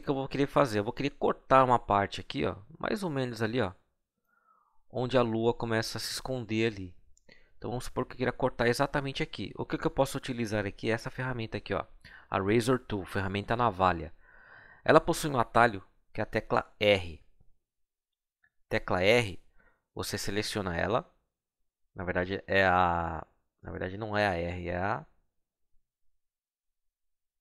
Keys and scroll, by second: 18.0 r.